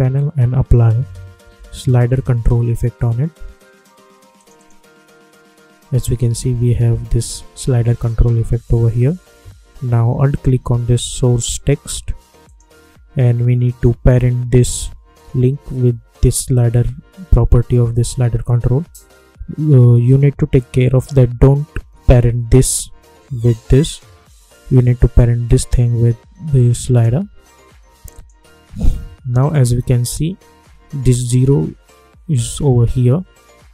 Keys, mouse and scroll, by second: 0.9-2.8 typing, 4.3 click, 12.4 alt+click, 25.1-28.1 drag.